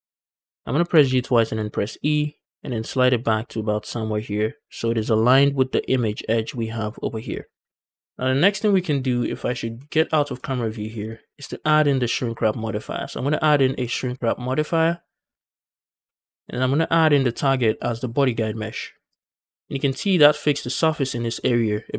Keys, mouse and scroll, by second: 0.0-0.5 scroll up 3, 0.4 shift+middle click, 0.8 g, 0.9 g, 2.0 e, 4.5 shift+click, 4.8 scroll down 2, 4.9 shift+middle click, 7.1 scroll down 3, 7.3 shift+middle click, 7.9-8.8 scroll down 2, 7.9 z, 8.8-9.2 middle drag, 9.2-9.6 scroll up 2, 9.6 middle drag, 10.0 shift+middle drag, 10.2-10.6 scroll up 2, 10.6 middle click, 10.9 shift+middle drag, 11.4 scroll down 1, 11.6 shift+middle click, 12.5-15.2 drag, 15.9-16.9 scroll down 1, 16.9-19.3 drag.